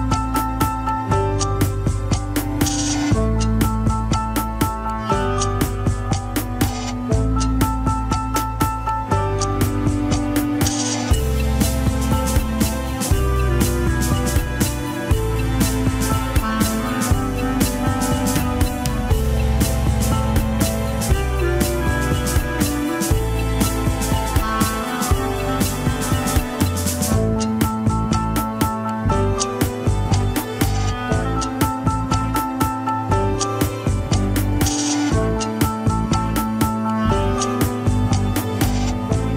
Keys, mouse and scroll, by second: 0.4 click, 1.7 g, 3.1 scroll up 6, 3.8 g, 8.2-9.6 middle drag, 9.6 KP_3, 10.3 ctrl+Tab, 10.5 shift+click, 10.8 ctrl+Tab, 11.4 alt+z, 12.6 ctrl+click, 12.7 alt+z, 13.1-14.2 middle drag, 14.2 scroll down 1, 14.3 shift+z, 14.6-16.2 middle drag, 16.2 click, 16.5-17.0 scroll down 2, 17.0-20.2 drag, 20.2 middle click, 20.7-21.1 scroll up 1, 21.1-22.7 drag, 22.7-23.7 middle drag, 23.7 click, 24.0-25.1 middle drag, 25.1 click, 25.8 middle click, 26.6 click, 27.3 alt+z, 28.3 alt+z, 29.0 click, 29.3 middle click, 30.1-31.3 drag, 31.3 middle click, 31.6 scroll up 1, 32.0-34.4 drag, 34.4 middle click, 35.3 click, 35.6 shift+z, 35.9 middle click, 36.8 scroll up 2, 37.0 alt+z, 38.3 ctrl+click, 38.3 alt+z, 38.6 middle click, 39.0-39.3 drag.